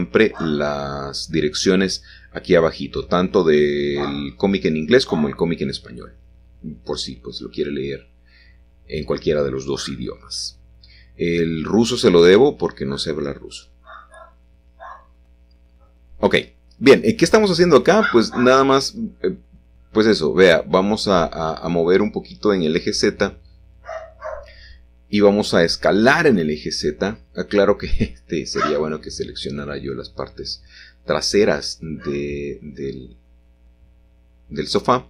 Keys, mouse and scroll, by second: 1.6 click, 2.4 a, 2.6 a, 3.7 alt+shift+click, 4.2 alt+shift+click, 5.3 typing, 8.4 click, 11.1 typing, 11.6 alt+shift+click, 12.1 alt+shift+click, 13.1 alt+shift+click, 13.5 alt+shift+click, 15.1 ctrl+z, 16.0 alt+shift+click, 16.9 typing, 18.2 g, 18.7 z, 19.9 Escape, 21.8-25.1 middle drag, 23.7 s, 23.9 z, 26.0 Escape, 27.5 alt+shift+click, 28.3-29.6 middle drag, 29.6 alt+shift+click, 30.1 middle click, 31.9 shift+middle click, 32.6-33.9 alt+shift+drag.